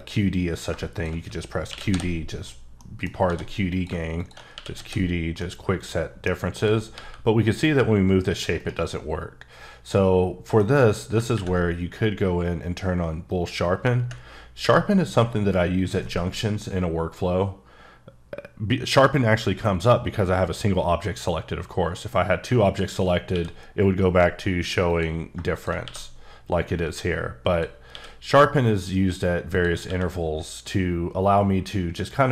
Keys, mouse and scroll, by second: 1.7 q, 1.9 d, 2.5 scroll up 1, 2.9 middle click, 3.3 shift+d, 3.7 click, 4.5 q, 4.7 d, 5.4 middle click, 6.6 click, 6.9 g, 8.6 right click, 10.0-10.6 scroll down 1, 10.6 middle click, 13.3 click, 14.4 scroll up 2, 14.6 q, 22.5 q, 22.6 click, 23.3 q, 24.9 click, 25.5 shift+click, 25.8 q, 27.5 click, 27.9 q, 29.5 click, 29.8 q.